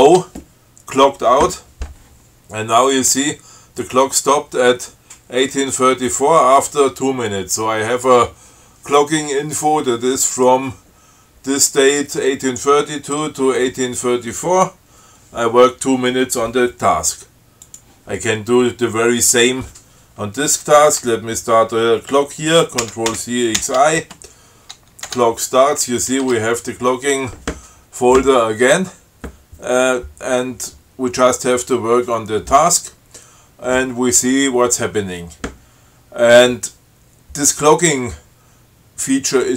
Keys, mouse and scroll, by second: 0.2 ctrl+o, 17.9 click, 23.1 ctrl+c, 23.4 ctrl+x, 23.9 ctrl+i, 25.3 Tab, 26.4 Down, 26.5 Tab.